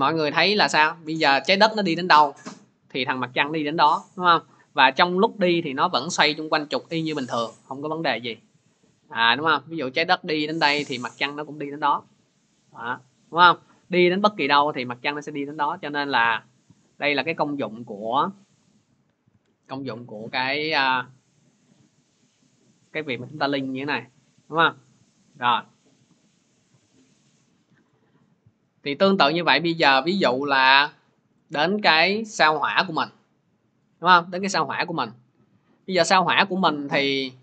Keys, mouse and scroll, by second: 8.3-15.8 drag, 17.0-19.2 drag, 19.2 Page_Down, 20.1 Page_Down, 24.8 click, 25.3 ctrl+z, 26.4 ctrl+z, 27.8 scroll, 29.4 click, 30.8-31.3 scroll, 31.6 middle click, 36.0-36.7 middle drag.